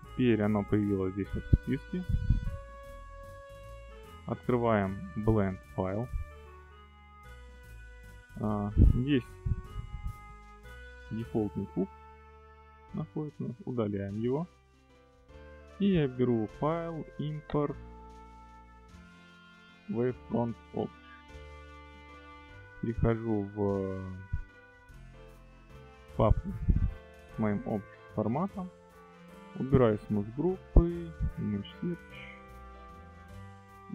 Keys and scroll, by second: 13.7 x.